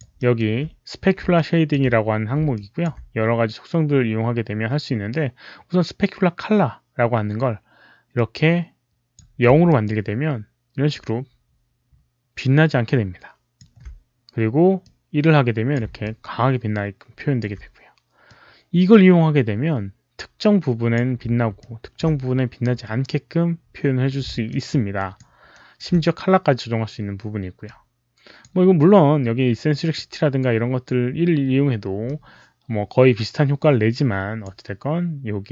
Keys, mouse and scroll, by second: 0.1 alt+middle drag, 1.2 alt+click, 2.4 alt+click, 2.5 alt+middle click, 8.0-9.0 alt+drag, 9.6-13.3 alt+drag, 14.8-17.3 alt+drag, 18.1-20.8 alt+drag, 21.5-21.8 alt+drag, 24.4-25.0 alt+drag, 25.5-26.3 alt+right drag, 26.4 alt+click, 27.5-28.3 alt+drag, 29.8-30.7 alt+drag, 29.8 alt+right click, 30.2 alt+right click, 31.9-34.3 alt+drag, 31.9 alt+right click.